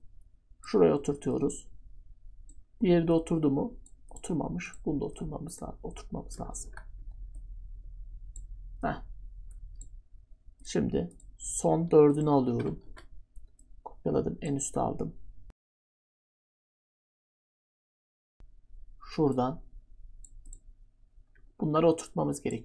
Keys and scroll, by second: 6.6 ctrl+z, 12.8 ctrl+d.